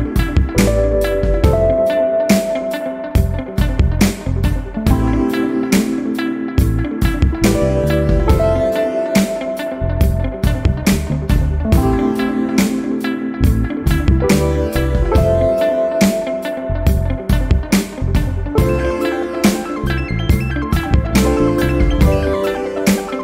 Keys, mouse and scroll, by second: 1.4 click, 4.1 0, 5.8 click, 7.8 x, 8.6 1, 10.5 -, 11.0 y, 13.7 click, 14.7 1, 15.9 -, 16.5 x, 16.8 0, 18.6 scroll down 2, 19.6 scroll down 2, 21.5 click.